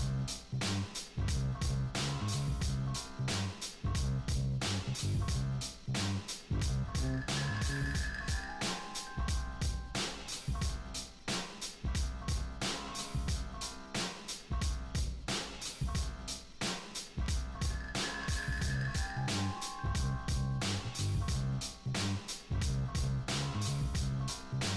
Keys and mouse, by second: 0.6 click, 1.0 ctrl+z, 1.5-1.9 drag, 2.0 click, 2.2 click, 2.8 click, 3.2 middle click, 3.6 click, 4.6 Return, 4.9 click, 5.4 click, 6.0 click, 6.8 click, 7.0 click, 7.2 click, 7.4-8.6 drag, 8.8 click, 9.1 click, 9.5 drag, 9.7 click, 10.0 click, 12.7 Return, 13.2 click, 13.9 click, 14.7-15.8 drag, 15.9 click, 16.0 click, 16.2 click, 16.5-17.0 drag, 17.5-18.2 drag, 18.4 drag, 18.8 drag, 19.2 drag, 20.2 click, 20.7-21.0 drag, 21.1 click, 22.1 click, 22.4-23.0 drag, 23.1 click, 23.6 click, 24.4 click.